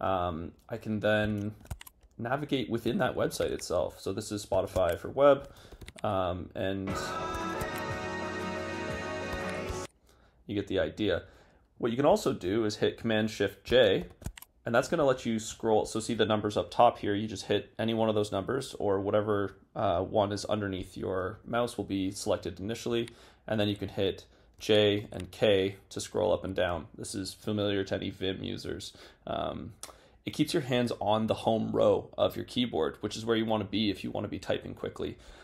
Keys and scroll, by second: 1.5 shift+super+?, 4.6 shift+super+?, 7.4 shift+super+?, 14.0 shift+super+j.